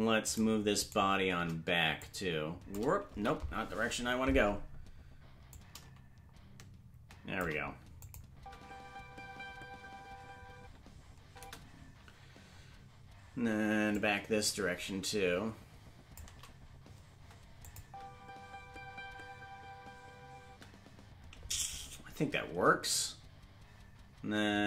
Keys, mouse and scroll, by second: 0.4 right click, 0.6 shift+right click, 1.9 shift+click, 1.9 right click, 3.6 ctrl+z, 5.4-7.4 drag, 8.0 click, 8.3 space, 13.9-16.1 drag, 13.9 space, 17.6 click, 17.8 space.